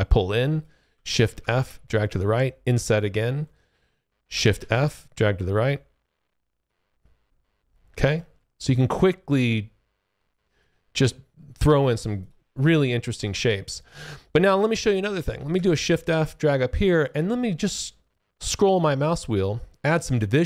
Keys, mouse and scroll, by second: 1.2 shift+f, 1.8 shift+click, 4.5 shift+f, 4.9 click, 6.9 alt+click, 8.1 alt+middle click, 8.5 alt+click, 10.2 alt+click, 12.1 click, 12.8 alt+click, 13.9 alt+click, 14.3 alt+middle click, 15.5 shift+f, 15.7 click, 17.5-19.3 scroll up 5, 19.3 scroll up 2, 20.0-20.4 scroll up 1.